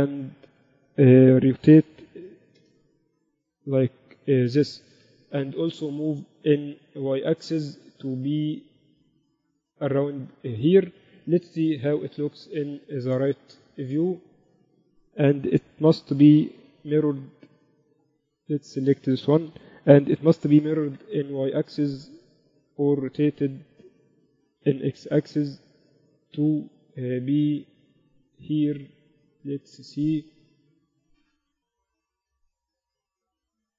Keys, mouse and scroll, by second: 1.3 shift+Tab, 2.2 r, 4.1-7.8 drag, 11.9 KP_3, 13.0-17.0 middle drag, 14.7 z, 17.0 y, 20.2 ctrl+l, 21.3 y, 22.1 Escape, 23.2 r, 25.0 r, 27.0 z, 27.9 middle click, 28.6-30.0 drag, 30.3-31.5 drag, 30.3-31.5 right drag, 31.5 middle click, 32.2 KP_4, 32.4 KP_4, 32.6-33.0 KP_8, 33.0-33.7 middle drag, 33.0 z.